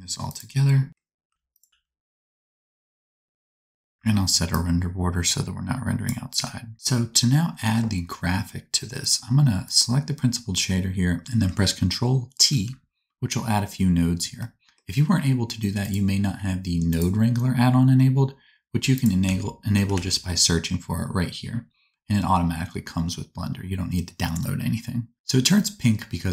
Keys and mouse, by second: 0.9 alt+g, 0.9 alt+r, 1.7 g, 1.7 KP_0, 2.4-3.9 drag, 3.2 g, 3.9 ctrl+b, 8.9 click, 9.6 click, 12.4 ctrl+t, 15.8-26.3 drag.